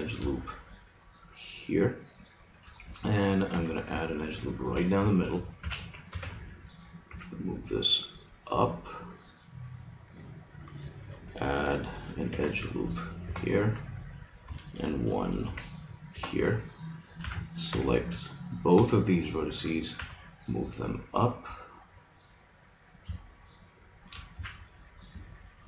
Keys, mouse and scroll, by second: 1.7-2.8 drag, 3.5 ctrl+r, 5.7 a, 6.1 b, 7.1 g, 12.3 ctrl+r, 15.5 ctrl+r, 17.2 a, 17.7 b, 18.7 b, 19.9 g, 24.3 a.